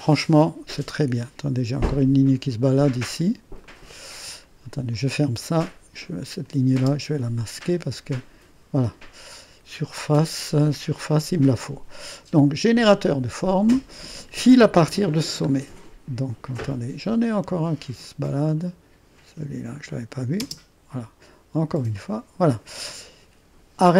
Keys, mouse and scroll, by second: 4.2-6.2 drag, 6.5-9.7 drag, 6.8 space, 9.8-11.5 drag, 11.7-15.9 drag, 15.9 middle click, 15.9-16.3 scroll up 1, 18.1-20.5 drag, 20.5 space, 22.9 click.